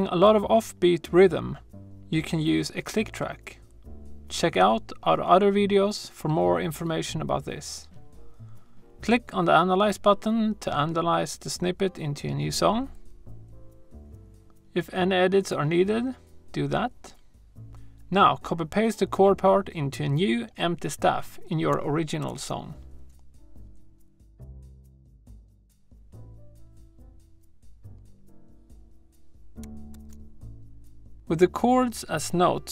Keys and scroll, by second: 22.0 super+c, 29.7 super+v.